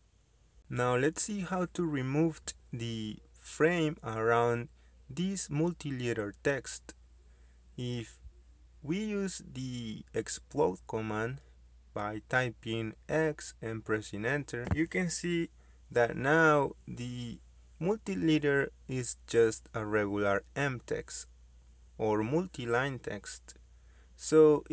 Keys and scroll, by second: 5.3 Escape, 8.4 Escape, 12.1 x, 12.2 space, 18.9 Escape, 19.9 Escape, 21.2 Escape, 22.8 Escape, 23.9 Escape.